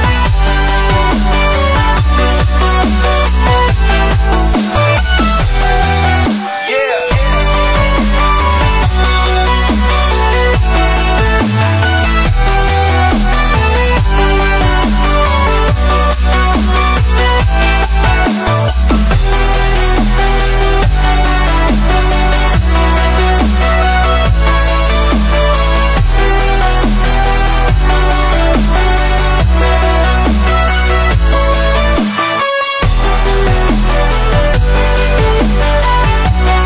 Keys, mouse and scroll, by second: 2.9 s, 6.6-8.2 drag, 8.2 ctrl+z, 8.9-9.9 drag, 9.9 ctrl+z, 10.8-16.1 drag, 16.3-18.4 middle drag, 18.4 click, 18.9-19.5 middle drag, 19.5-20.8 drag, 21.2-22.2 middle drag, 22.2-25.0 drag, 25.0 middle click, 25.7 click, 26.3 click, 26.5 scroll down 1, 26.5-26.9 middle drag, 26.9 scroll up 1, 27.1-28.3 middle drag, 28.3 scroll down 1, 28.6-28.9 middle drag, 28.9-29.5 scroll up 1, 29.5-30.3 scroll up 1, 30.3-32.5 drag, 32.5 middle click, 33.3 drag, 34.2-34.8 scroll up 1, 34.8-35.6 drag, 35.6 middle click, 36.5-36.6 drag.